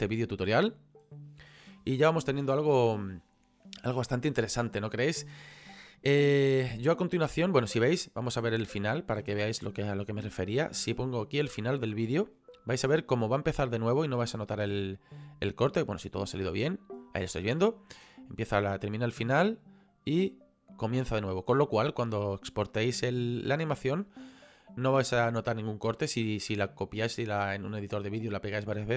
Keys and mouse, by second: 8.2 click, 15.1 click, 18.2 click.